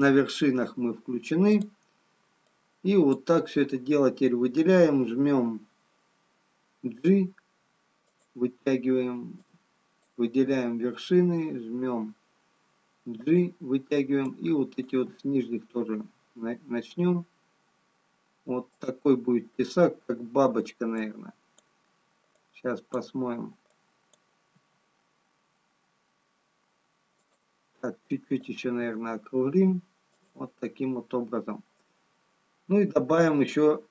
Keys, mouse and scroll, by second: 1.7 click, 9.5 click, 9.5 g, 10.6 g, 14.6 click, 15.5 g, 21.2 click, 22.7 click, 24.7 g, 28.9 click, 28.9 g.